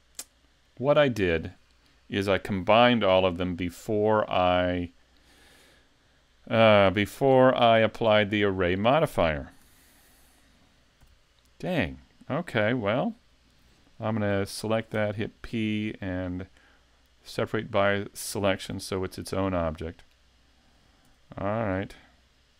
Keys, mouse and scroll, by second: 9.7 a, 11.0 l, 15.0 p, 18.7 a, 19.7 middle click, 21.1 Tab, 21.7 right click.